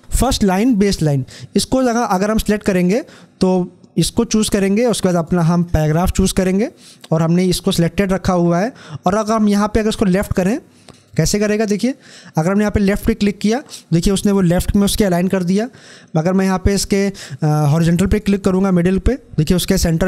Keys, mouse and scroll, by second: 3.9 click, 10.1 click, 11.8 click, 17.8 click.